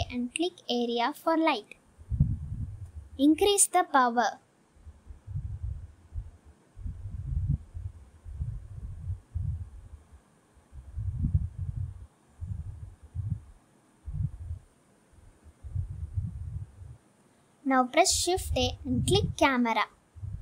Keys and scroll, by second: 1.1 shift+a, 3.5 s, 6.5 g, 6.7 z, 7.9 s, 8.9 g, 9.3 y, 9.5 x, 12.0 1, 12.1 0, 12.7 Return, 14.1 s.